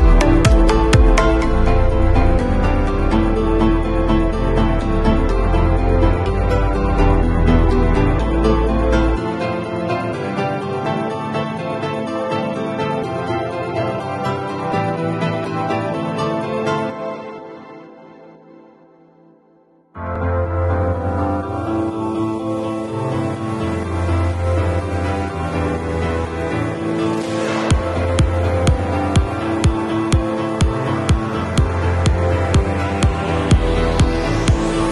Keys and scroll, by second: 16.8 super+u.